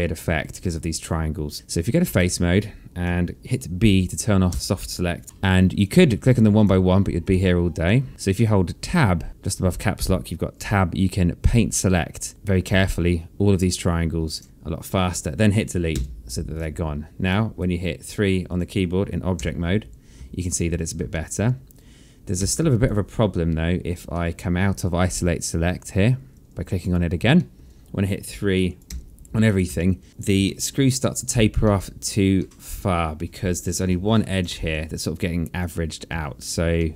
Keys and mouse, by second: 0.8 1, 2.2 right click, 4.5 b, 6.3 click, 7.1 shift+click, 8.9 Tab, 11.7 Tab, 11.7 click, 14.5 Tab, 16.4 Delete, 17.1 right click, 19.0 click, 19.9 3, 20.9 alt+click, 21.6 alt+middle click, 22.9 1, 23.2 alt+click, 24.6 alt+middle click, 26.8 click, 27.9 alt+middle click, 28.8 click, 29.4 3, 30.0 click, 30.6 click, 31.0 alt+middle click, 32.1 alt+middle click, 34.4 1, 35.2 3, 36.6 1.